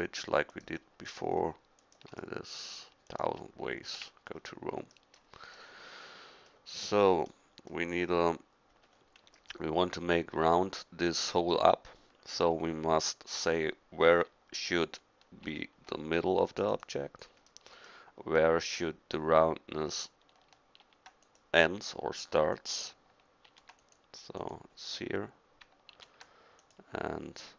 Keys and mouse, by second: 2.3 middle click, 4.0 f, 4.3-6.1 middle drag, 15.4 ctrl+r, 20.8 ctrl+r, 23.5 ctrl+r, 25.9 ctrl+r.